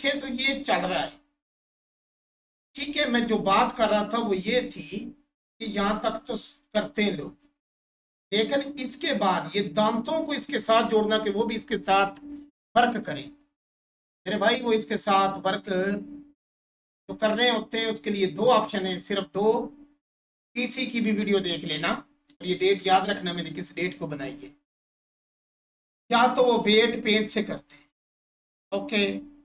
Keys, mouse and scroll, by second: 0.0-4.0 drag, 4.0-4.5 scroll up 1, 4.6-6.2 alt+drag, 6.2 1, 7.3 shift+click, 8.6-12.5 drag.